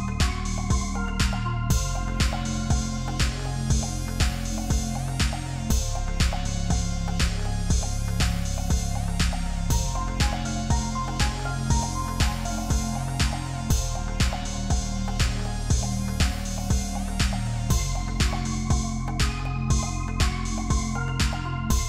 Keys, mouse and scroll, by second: 2.3 ctrl+d, 5.5 Right, 5.6 Right, 6.3 typing, 7.4-10.4 typing, 12.6 double click.